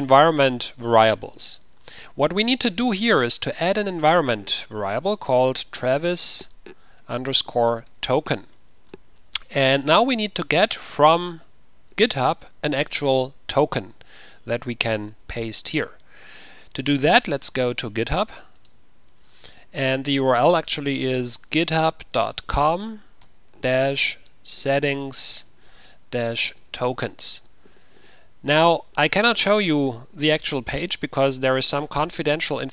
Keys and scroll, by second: 6.0-6.4 typing, 7.5-8.3 typing, 21.3-23.4 typing, 24.5-27.1 typing.